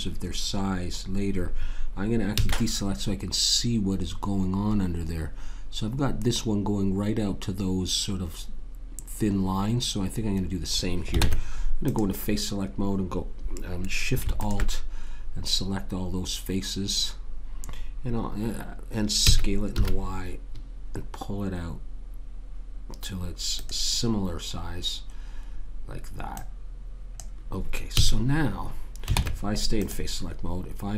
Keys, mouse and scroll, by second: 2.3 a, 11.2 ctrl+Tab, 14.4 click, 19.2 s, 26.3 click, 28.0 a, 29.1 ctrl+Tab.